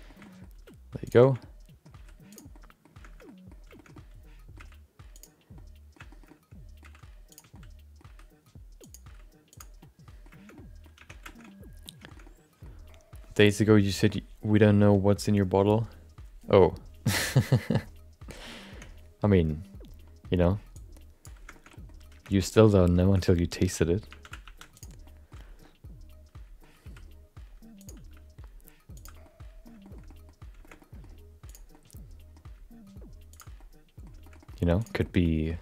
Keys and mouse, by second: 0.0 shift+middle click, 0.2 middle click, 0.5 r, 1.4 middle click, 1.9 r, 2.5 middle click, 3.2 middle click, 3.7 shift+middle click, 3.9-5.4 middle drag, 4.5 g, 5.5 middle click, 6.1 shift+middle click, 6.3 middle click, 6.8 g, 7.5 middle click, 9.0 r, 9.2 g, 9.8 middle click, 10.5 middle click, 11.0 Tab, 11.2 shift+middle click, 11.4 middle click, 12.1 shift+middle click, 18.9 Tab, 20.7 click, 21.7 middle click, 22.1 Tab, 22.4 shift+middle click, 22.6 middle click, 23.1 shift+middle click, 23.2 middle click, 24.1 1, 24.4 shift+2, 24.7 click, 25.0 middle click, 25.6-26.6 middle drag, 26.8 r, 28.1 g, 29.2 middle click, 29.8 shift+middle click, 30.0 middle click, 30.6 shift+middle click, 30.8 middle click, 31.5 click, 31.7 middle click, 32.5 g, 33.5 middle click, 34.2 middle click, 34.4 middle click, 34.8 click, 35.0 middle click, 35.4 middle click.